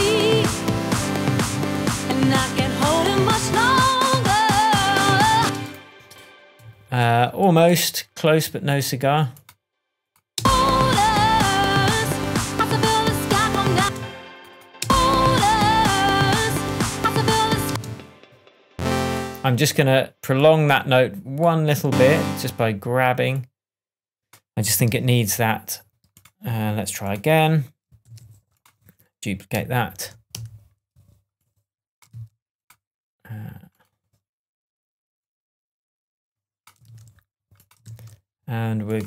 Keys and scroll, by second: 5.3 space, 10.3 space, 13.7 space, 17.6 space, 24.8 shift+Tab, 28.0 super+j, 29.9 super+d, 33.1 super+v, 36.8 super+c, 37.8 super+v.